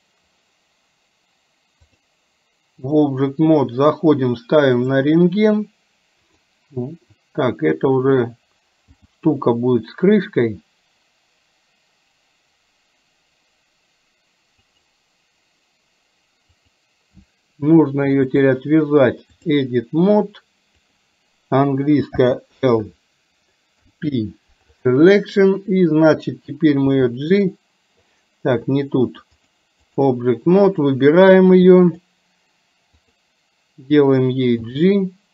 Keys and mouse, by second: 1.9-3.0 drag, 6.3 click, 9.0 g, 16.7 click, 18.4-19.7 drag, 20.9 click, 22.2 l, 23.9 p, 27.0 g, 29.4 click, 30.8 click, 34.7 g.